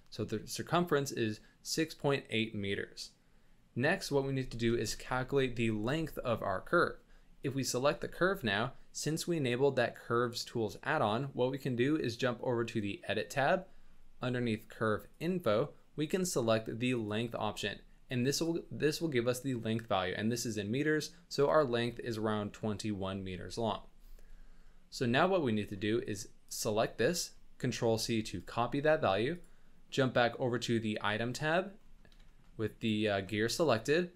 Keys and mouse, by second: 4.7 middle click, 5.1 z, 6.1 shift+middle drag, 6.3-6.6 middle drag, 7.4 click, 12.0 click, 15.1 click, 17.0 click, 18.3-21.4 drag, 26.5-28.3 drag, 31.4 middle drag, 32.2 shift+click, 32.8 click, 33.3 middle click.